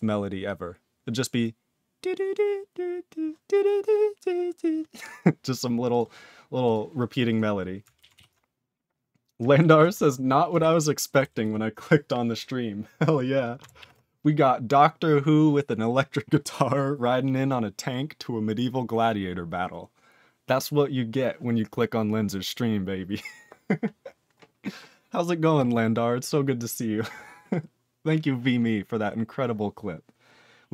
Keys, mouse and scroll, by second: 6.7 ctrl+s, 7.3 click, 7.3 click, 8.1 ctrl+s, 9.7 ctrl+s, 10.6 ctrl+b, 11.4 ctrl+s.